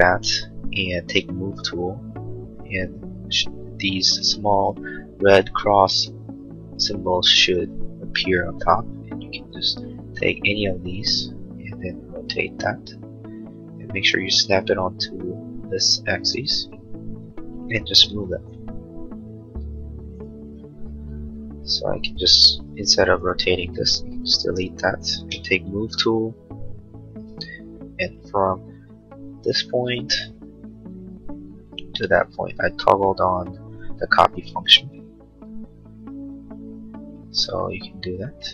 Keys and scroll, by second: 1.3 m, 18.1 m, 21.9 space, 25.4 m.